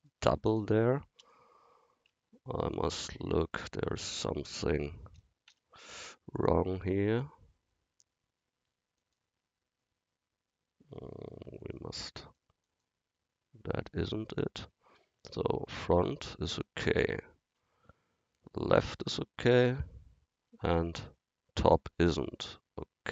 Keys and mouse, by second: 1.2 KP_1, 3.3 Tab, 3.9 Tab, 5.5 n, 9.0 click, 11.6 click, 15.3 KP_1, 17.6 ctrl+KP_3, 20.5 KP_7.